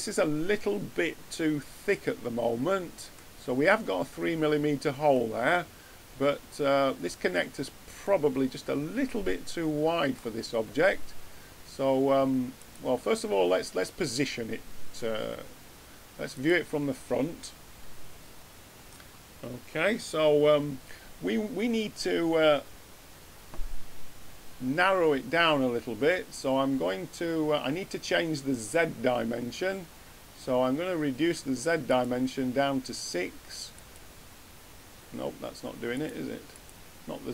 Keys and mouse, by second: 31.8-35.4 drag, 35.8-37.3 drag.